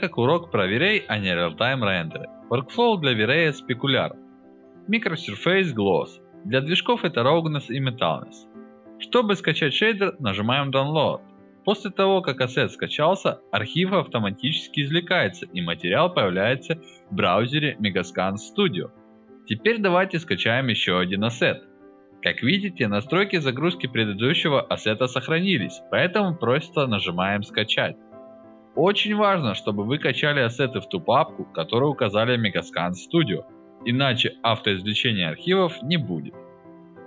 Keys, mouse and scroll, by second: 0.0 click, 2.9 click, 3.9 click, 6.2 click, 7.8 click, 8.3 click, 8.5 click, 11.5 click, 16.1 click, 16.4 click, 18.6 click, 19.4-19.7 scroll down 1, 19.8 middle click, 19.8-21.1 scroll up 3, 20.2 middle click, 25.6 click, 31.0 click.